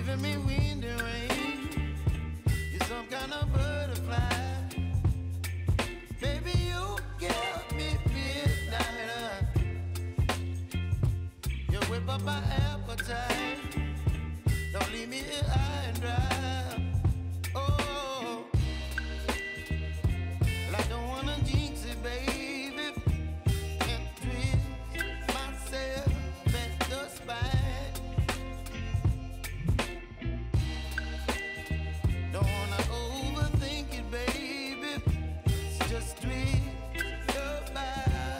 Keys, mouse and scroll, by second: 0.9-3.7 drag, 3.7 ctrl+z, 5.0 click, 5.8 space, 8.6 click, 10.1 u, 12.1 click, 18.5 click, 19.0 space, 19.9-38.3 drag.